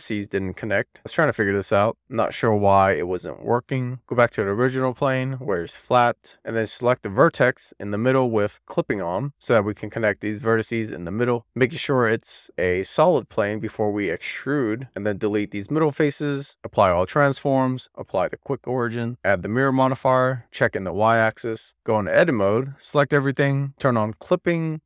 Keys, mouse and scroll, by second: 0.8 scroll up 1, 1.1 scroll down 2, 1.2 middle click, 1.4 super+z, 1.7 click, 2.0 click, 2.2 super+z, 2.7 super+z, 2.8 middle click, 3.0 click, 3.2 super+z, 3.3-3.6 scroll down 1, 3.6 alt+middle click, 3.8 scroll down 1, 3.9 alt+middle click, 4.5 alt+z, 4.8-6.2 scroll up 4, 6.2 click, 7.8 click, 9.1 super+z, 9.9 shift+middle click, 10.5 click, 11.1 click, 12.4 middle click, 13.0 scroll down 2, 13.2 shift+middle click, 13.4 a, 13.9 d, 14.7 scroll down 2, 14.9 x, 16.4 n, 17.0 ctrl+a, 17.8 alt+q, 19.0 scroll up 1, 20.5 click, 21.0 middle click, 21.4 alt+middle click, 21.6 click, 22.0 super+z, 22.2 Tab, 23.3 a, 24.0 click, 24.5 alt+z.